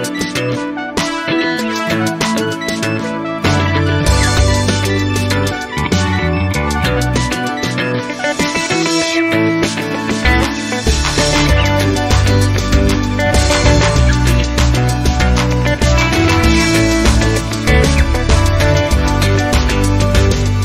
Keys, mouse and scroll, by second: 0.4 click, 0.9-7.7 drag, 7.8 o, 11.2 ctrl+z, 17.9 click.